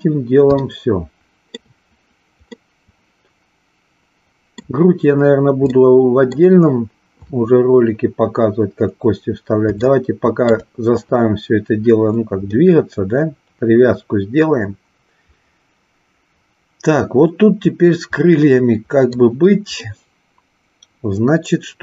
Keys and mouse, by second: 0.7 shift+middle click, 2.6-4.6 middle drag, 5.7 middle click, 9.9 shift+middle click, 12.5-19.2 middle drag, 19.8-21.8 middle drag.